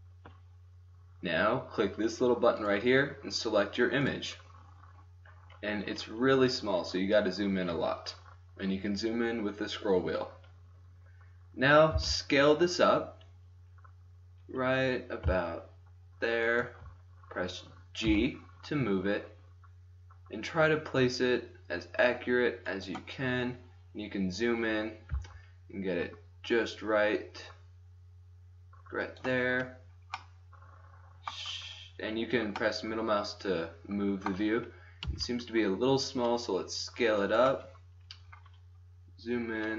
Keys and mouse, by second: 2.8 click, 2.9-4.4 drag, 4.4-5.7 middle drag, 5.9 middle click, 6.1-12.0 middle drag, 12.0 s, 12.6-13.7 middle drag, 18.2 g, 25.2 g, 29.6-31.7 middle drag, 32.6 middle click, 34.4 middle click, 35.1 s, 37.6-38.1 drag.